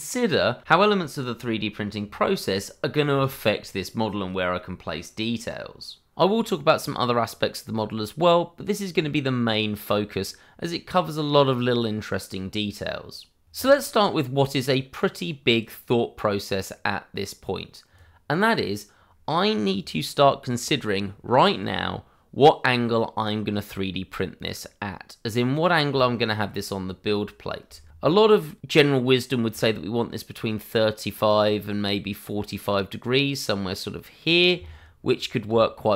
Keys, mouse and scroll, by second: 3.3 click, 14.9 click, 22.1 scroll down 1, 24.8 scroll up 1, 25.5 scroll down 1, 26.0 shift+middle click, 26.8 scroll up 1, 27.4 scroll down 1, 27.7 shift+middle click, 29.5 r, 34.2 click, 34.7 scroll up 1, 35.3 shift+middle click, 35.6 scroll up 1, 35.8 middle click.